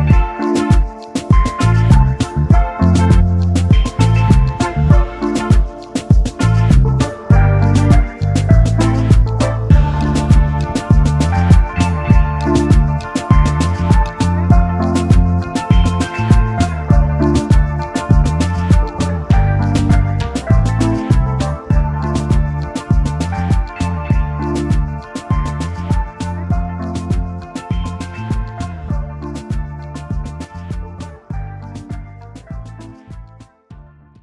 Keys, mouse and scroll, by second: 0.2 double click, 2.5 alt+scroll up 1, 2.8 space, 3.3 space, 3.8 alt+scroll down 1, 4.3 alt+scroll down 1, 5.9-6.3 alt+scroll up 1, 17.1 double click, 17.3 alt+scroll down 1, 18.0 space, 18.1 double click, 19.2 space, 19.7 space, 19.9 alt+scroll up 1, 20.4 space, 20.6 alt+scroll down 1, 21.9 right click, 22.6 double click, 22.8 space, 22.9 double click, 23.4 double click, 24.2 alt+scroll up 1, 24.8 double click, 26.4 alt+scroll down 1, 27.2 double click, 29.0 alt+shift+click, 30.0 alt+shift+click, 31.0 Delete, 32.4-33.0 alt+scroll up 2, 32.5 space.